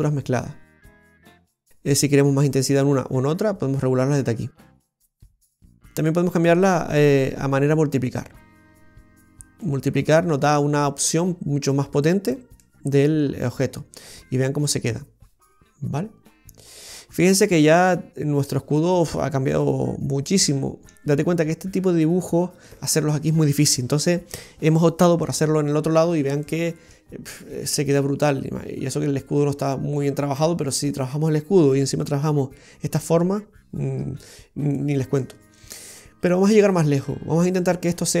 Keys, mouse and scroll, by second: 1.2-2.8 scroll up 3, 5.9 click, 10.5 click, 12.7 middle click, 13.3-13.9 scroll down 3, 13.7 middle click, 18.8 scroll up 1, 19.4 middle click, 19.4-19.9 scroll up 2, 26.5 middle click, 26.5-27.0 scroll down 3, 28.0-29.2 scroll up 1.